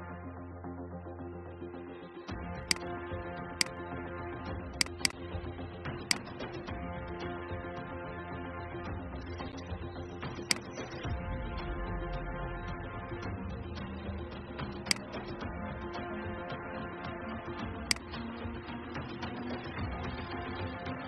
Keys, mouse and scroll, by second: 0.1 ctrl+f, 2.5 click, 7.3 alt+scroll down 1, 9.4 alt+scroll up 1, 10.3 click, 11.9 alt+scroll down 1, 18.8 Delete, 20.6 ctrl+f.